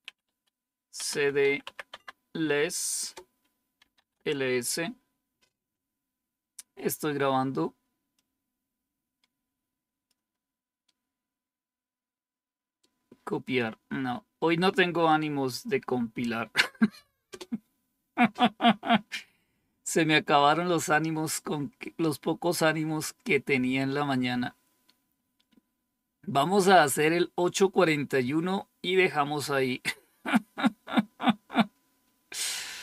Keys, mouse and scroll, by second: 0.0-2.0 typing, 2.9 Return, 3.5-4.2 typing, 8.0-10.0 drag, 10.7-12.7 right drag, 15.0-16.1 right drag, 17.2 Return, 32.7-32.8 scroll down 2.